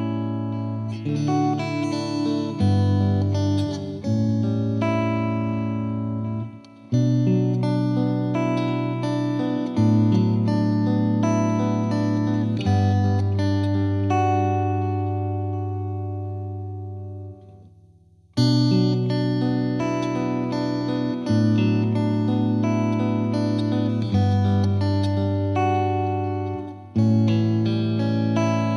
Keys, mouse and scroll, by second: 7.5 right click, 8.5-12.0 drag, 14.0 ctrl+z, 14.4 g, 21.5 right click, 22.3 space, 23.4 space, 24.6-26.0 drag, 26.0 space, 27.1 space, 27.5 g, 28.2 drag, 28.5 space.